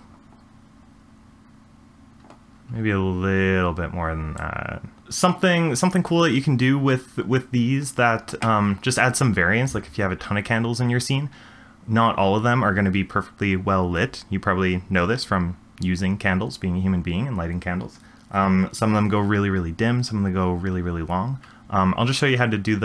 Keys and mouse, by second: 4.4 shift+click.